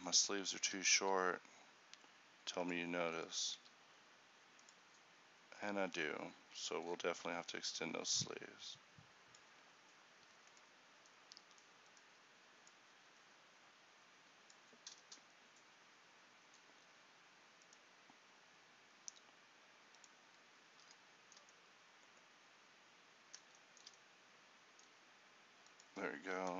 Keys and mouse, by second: 1.1 r, 1.1 g, 3.7 r.